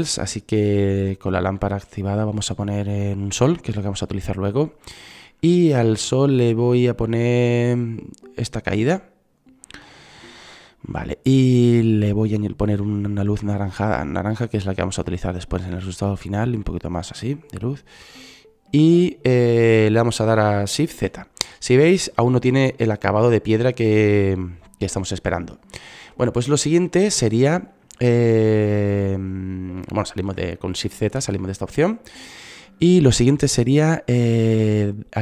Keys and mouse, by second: 7.2-10.0 drag, 15.3-18.8 drag, 21.8 shift+z, 25.8 click, 28.1 shift+z, 31.3 click, 33.7-35.2 drag.